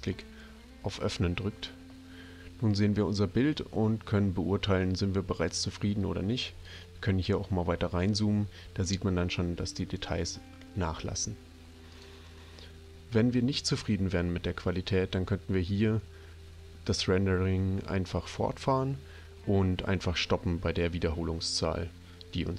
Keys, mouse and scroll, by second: 0.1 click, 5.5 click, 9.0-10.0 drag.